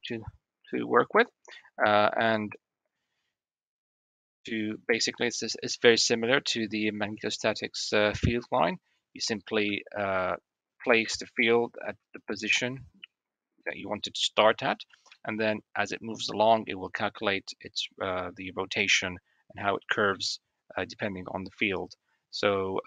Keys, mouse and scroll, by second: 0.9 shift+middle click, 7.7-8.2 shift+middle drag, 8.6 middle click, 10.0 shift+d, 14.9 shift+middle drag, 19.9 shift+middle click.